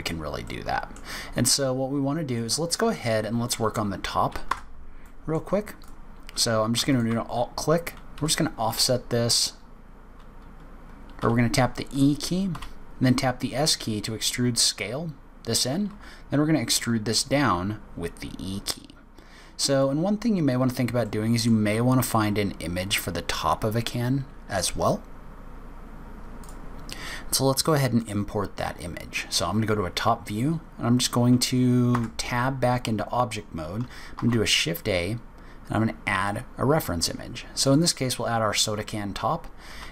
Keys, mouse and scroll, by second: 0.1-0.4 scroll down 3, 0.4 middle click, 1.9-2.3 scroll up 1, 2.3 middle click, 3.0-3.4 scroll up 3, 3.4 click, 4.5 Tab, 5.0 middle click, 5.8 click, 6.9 alt+click, 8.2 f, 11.2 e, 15.9 e, 20.2-21.0 scroll down 2, 21.0 middle click, 21.0-21.9 scroll down 2, 21.9 scroll up 3, 27.8 click, 31.8 Tab, 34.0 shift+a, 38.7-39.6 scroll down 6, 39.6 scroll down 1, 39.6 s.